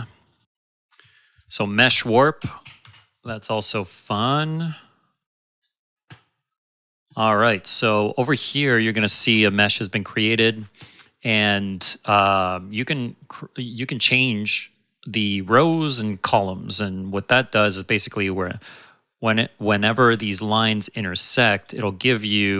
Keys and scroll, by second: 1.7 shift+Num_Lock, 1.8-3.3 typing, 4.6-5.4 typing.